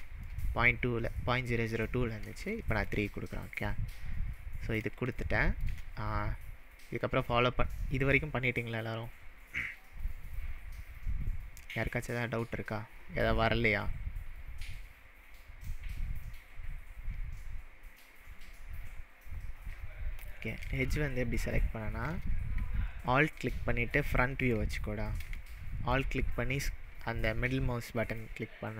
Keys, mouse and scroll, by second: 0.3-0.8 middle drag, 2.4-3.1 shift+middle drag, 5.1-5.7 shift+middle drag, 20.2 click, 20.8-21.3 shift+middle drag, 21.8-22.2 shift+scroll up 2, 23.1-23.6 alt+middle drag, 24.0-24.5 alt+middle drag, 25.4-25.9 shift+middle drag, 28.1 click.